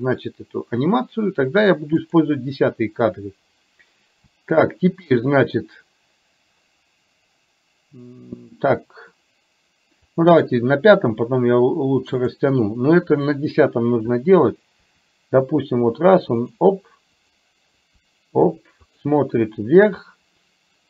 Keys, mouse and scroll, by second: 2.1 click, 4.6 shift+middle click, 10.2 click, 14.9 r, 17.2 click, 17.9 r.